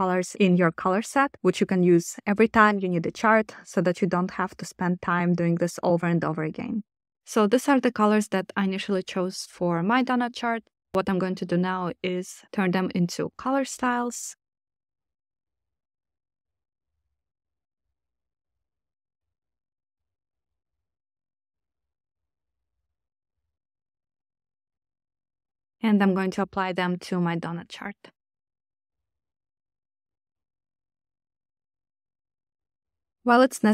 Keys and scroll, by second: 13.3-14.9 typing, 17.7-19.1 typing, 22.0-24.0 typing.